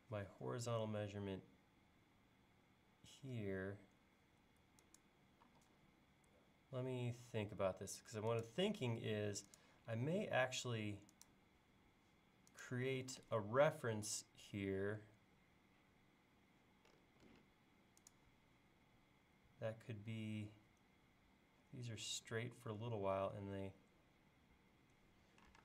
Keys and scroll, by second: 5.5 l, 10.2 l.